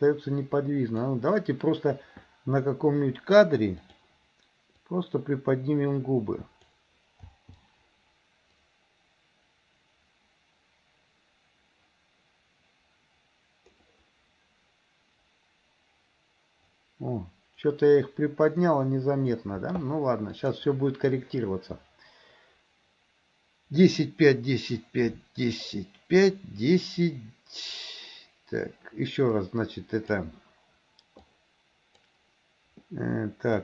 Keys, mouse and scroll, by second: 3.9 click, 5.0-6.8 drag, 8.7-19.5 drag, 20.4 click, 29.4-30.2 drag, 31.3 click, 33.5 click.